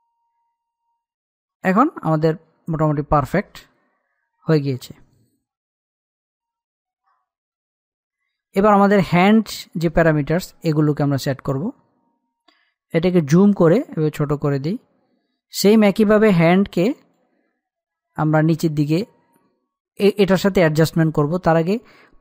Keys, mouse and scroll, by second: 8.7 click, 9.5-10.1 scroll up 1, 10.1-12.9 middle drag, 13.5-15.8 drag, 15.8-16.4 scroll up 1, 16.4-19.0 drag, 19.0-19.9 scroll down 1, 21.8 scroll up 1.